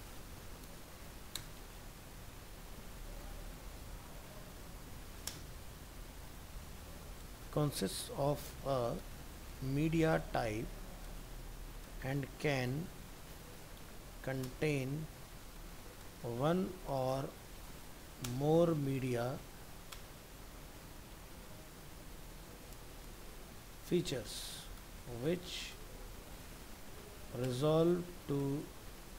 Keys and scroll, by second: 1.8 ctrl+Left, 2.5 ctrl+shift+Right.